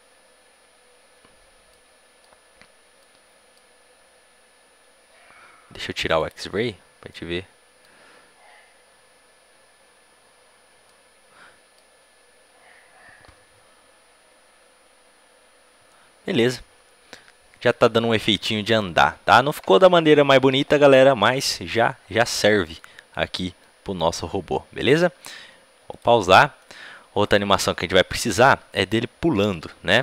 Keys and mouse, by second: 1.6-4.7 middle drag, 6.1-7.9 drag, 7.0 middle click, 7.9 middle click, 10.8-16.1 middle drag, 21.1-25.2 middle drag, 25.8-30.0 drag.